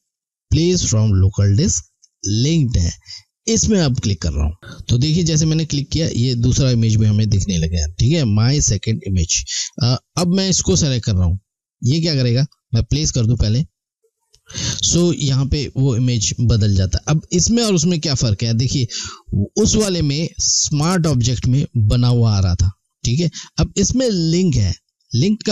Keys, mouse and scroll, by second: 3.4 click, 9.6 click, 13.0 click.